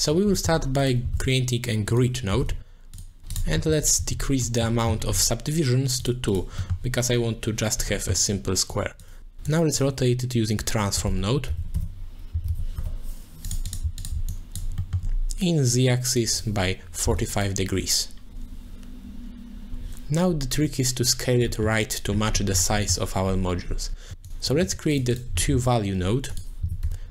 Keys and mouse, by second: 0.8 click, 1.1 shift+a, 3.0 shift+a, 3.8 alt+shift+click, 4.4 middle click, 6.3 click, 6.6 middle click, 8.0 middle click, 8.7 click, 9.4-13.5 drag, 13.7 click, 14.0 alt+shift+click, 14.5 click, 14.8 middle click, 15.8 click, 16.3-17.3 drag, 20.8 click, 21.5 middle click, 22.5 middle click, 22.9 middle click, 24.1 g, 24.5 shift+click, 24.6 g, 25.1 click, 25.5 shift+a.